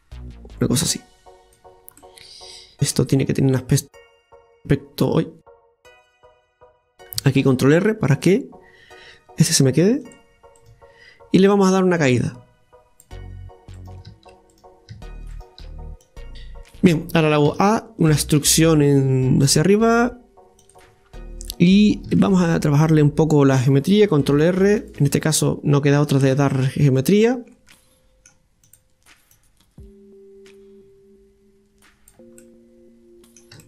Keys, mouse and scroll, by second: 2.0-3.6 middle drag, 3.6 right click, 4.2-7.2 drag, 7.4 ctrl+r, 10.6-12.0 right drag, 12.0-13.8 drag, 13.8-16.0 right drag, 16.0 click, 16.3-17.5 scroll down 1, 17.5 a, 21.1-21.5 scroll up 1, 21.5-22.6 middle drag, 22.6 scroll up 2, 22.9-24.3 middle drag, 24.4 ctrl+r, 25.4 middle click, 26.3-27.6 scroll up 2, 27.6 scroll up 2, 27.7 middle click, 28.7 click, 29.3 click, 32.4-33.6 middle drag.